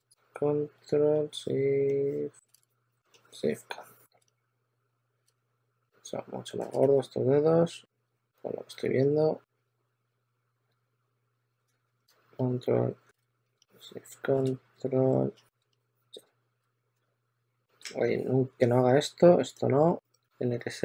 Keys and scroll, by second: 2.4 super+z, 5.2 super+z, 6.7-11.4 typing, 11.6 super+a, 13.1 super+z, 16.5 super+z, 17.0-17.8 typing, 18.2 shift+super+d, 20.1 shift+super+x, 20.4 shift+super+d.